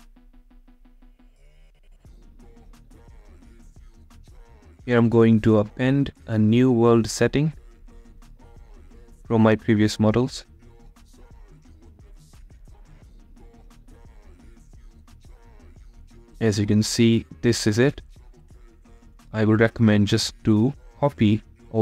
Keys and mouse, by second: 19.8-21.8 drag.